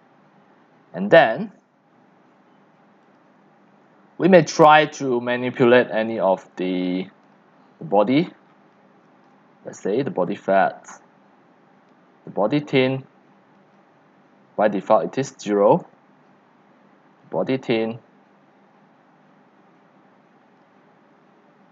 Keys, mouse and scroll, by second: 0.0-0.3 typing, 3.2-7.1 drag, 8.3 scroll down 12, 9.0 c, 9.2-15.6 drag, 20.6-21.7 drag.